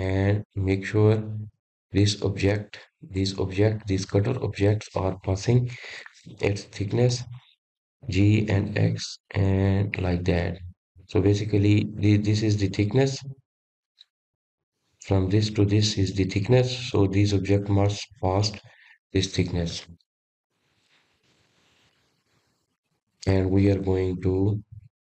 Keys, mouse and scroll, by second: 1.0 g, 6.2 drag, 6.5-7.6 middle drag, 7.6 click, 8.1 click, 10.6-12.3 middle drag, 12.3 g, 14.7-17.8 middle drag, 18.2-23.1 drag, 24.5 ctrl+z, 24.9 ctrl+z.